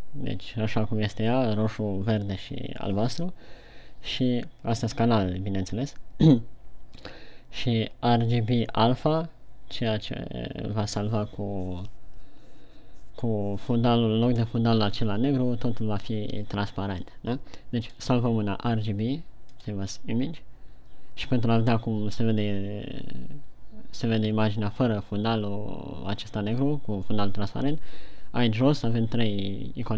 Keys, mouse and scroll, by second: 21.1 click.